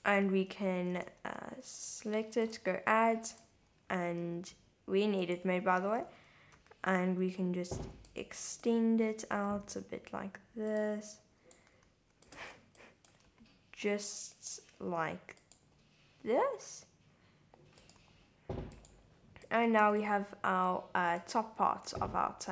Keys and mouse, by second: 0.5 Tab, 1.2 shift+z, 2.4 click, 4.0 g, 5.2 click, 5.8 s, 6.0 x, 6.6 y, 8.1 click, 8.8 click, 9.4 r, 10.7 click, 11.2 click, 11.7 r, 12.3 click, 12.5 super+z, 12.9 super+click, 13.3 r, 14.3 click, 14.8 g, 15.4 click, 15.6 r, 17.8 click, 18.0 g, 18.8 click, 19.4 click, 19.9 g, 20.0 z, 21.2 click, 22.0 shift+z, 22.3 shift+z.